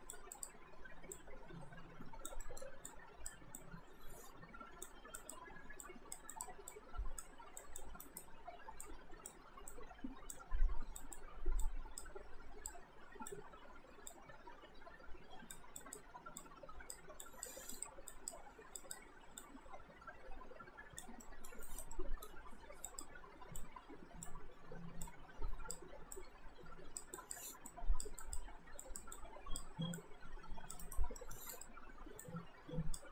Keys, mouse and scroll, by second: 2.5 alt+middle click, 2.9 click, 8.0 alt+right click, 8.8 click, 11.0 click, 21.3 alt+middle click, 21.7 alt+right click, 21.9 alt+middle click, 22.9 click, 30.8 alt+right click, 31.2 middle click, 31.6 click.